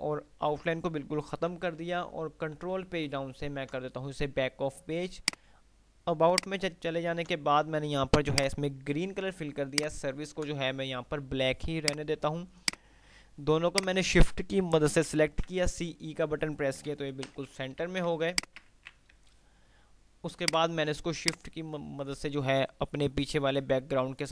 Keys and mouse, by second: 1.9 ctrl+Page_Down, 5.4 click, 9.9 ctrl+click, 13.9 shift+click, 16.8 ctrl+g, 17.4 Delete, 18.3 ctrl+z, 18.6 shift+click, 18.9 c, 19.4 F3, 20.6-24.3 drag, 21.3 typing.